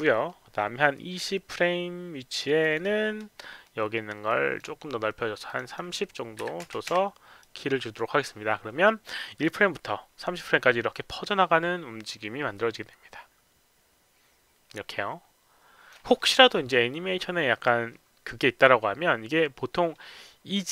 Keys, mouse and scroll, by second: 2.5 click, 4.2 click, 5.4 click, 5.6 click, 6.4 KP_3, 6.6 KP_0, 7.3 right click, 7.9 KP_0, 7.9 KP_3, 9.4-15.8 drag.